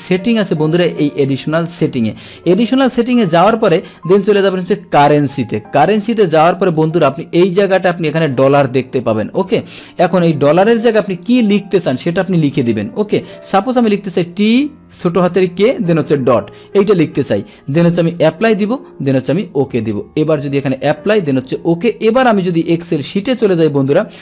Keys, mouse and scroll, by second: 1.7 click, 2.9 click, 5.0 click, 6.7 click, 8.2 click, 11.1 click, 12.2 BackSpace, 12.4 BackSpace, 18.1 click, 19.3 click, 20.7 click, 21.3 click, 23.2 Tab.